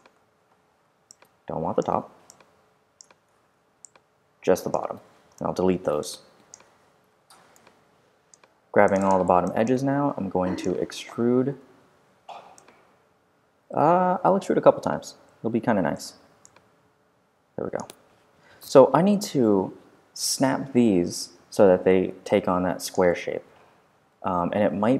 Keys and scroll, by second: 3.3 super+4, 5.3 super+BackSpace, 7.0 super+5, 7.7 5, 11.5 r, 15.1 g, 15.9 r.